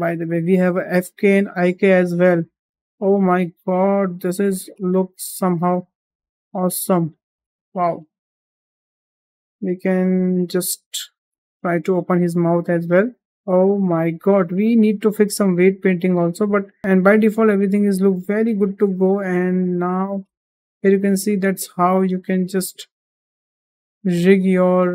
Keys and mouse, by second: 0.2 middle click, 0.7 g, 2.6-2.9 middle drag, 3.1 g, 4.6-5.0 middle drag, 5.9 r, 8.5 ctrl+z, 8.8 ctrl+z, 9.2 middle drag, 9.8 shift+middle click, 11.3 click, 11.5-12.0 middle drag, 12.5 middle click, 12.9 g, 13.3 g, 14.4 middle drag, 16.1-16.7 middle drag, 16.8 g, 17.7 shift+middle drag, 18.5 middle click, 18.8 shift+middle drag, 19.5 middle drag, 19.8 shift+middle drag, 20.4 middle drag, 20.8 shift+middle drag, 21.2 middle drag, 22.0 middle drag, 22.6 g.